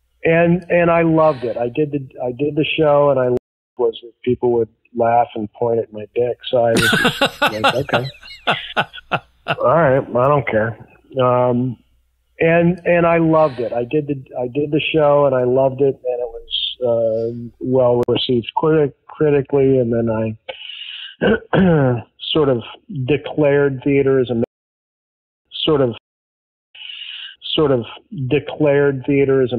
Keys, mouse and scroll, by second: 3.0 click, 3.3 space, 3.6 click, 3.7 space, 7.6 F8, 12.9 ctrl+s, 15.2-17.4 drag, 18.0 Delete, 19.5 click, 20.4 click, 23.1-24.4 drag, 24.4 space, 25.1 ctrl+shift+Delete, 25.4 space, 25.9 space, 26.6 click, 26.6 space, 28.6 ctrl+s.